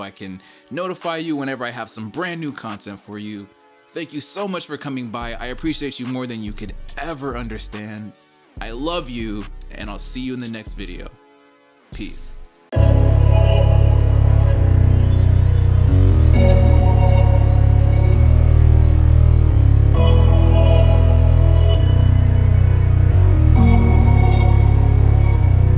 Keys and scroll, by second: 3.6 e, 3.7 ctrl+c, 4.0 ctrl+v, 4.4 ctrl+v, 4.7 ctrl+v, 5.2 shift+Right, 5.2 shift+Right, 5.9 ctrl+l, 6.8-7.9 typing, 10.8-11.6 typing.